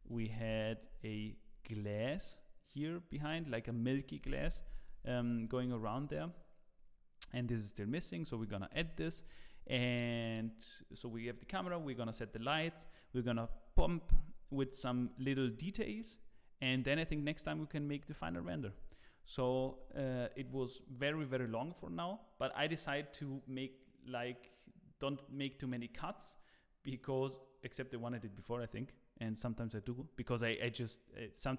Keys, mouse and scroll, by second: 0.4 KP_1, 5.4 middle click, 5.8 scroll down 1, 6.1 middle click, 8.7 KP_0.